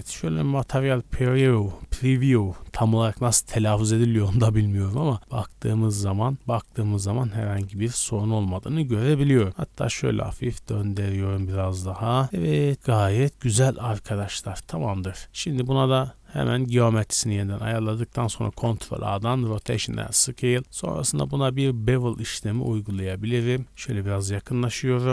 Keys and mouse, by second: 2.8-3.5 drag, 3.5-5.2 middle drag, 3.5 z, 5.2-6.2 drag, 6.2-8.5 middle drag, 8.6 r, 9.5 shift+middle click, 11.3 middle drag, 11.6-13.0 middle drag, 11.6 a, 11.8 a, 13.0 click, 13.1 middle click, 13.5 click, 13.6-15.2 middle drag, 15.2-17.5 drag, 15.3 w, 17.5 middle click, 17.5-23.4 drag, 18.5 ctrl+a, 23.6 shift+click, 23.7-24.1 shift+middle drag.